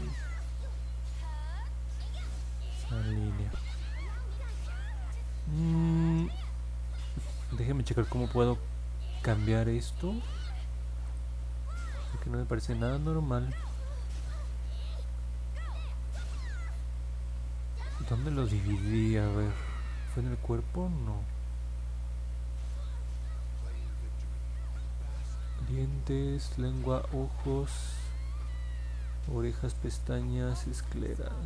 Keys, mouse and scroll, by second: 3.4 middle click, 4.2 middle click, 4.2 scroll down 1, 8.7 middle click, 11.0 click, 12.0-13.5 alt+drag, 19.1 scroll down 1, 19.7 middle click, 21.2 middle click, 22.8 middle click, 24.3 middle click, 25.5 scroll down 2, 26.6 scroll down 2, 29.4 scroll down 1, 30.2-30.7 scroll down 2, 30.8 scroll up 1, 31.2 scroll down 1.